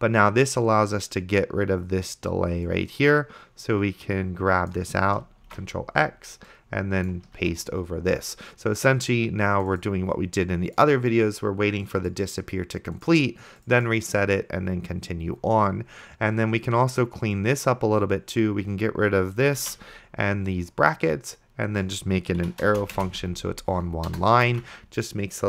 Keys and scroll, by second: 5.8 ctrl+x, 7.7 ctrl+v, 20.1 ctrl+x, 22.5 =, 23.0 space, 23.7 ctrl+v, 24.1 BackSpace, 24.9 ctrl+s.